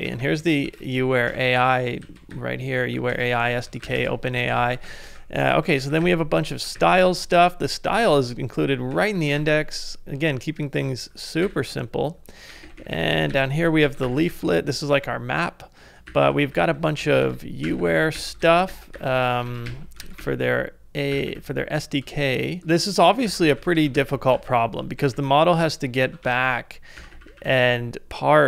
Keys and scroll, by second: 6.2 ctrl+c, 6.3 ctrl+d.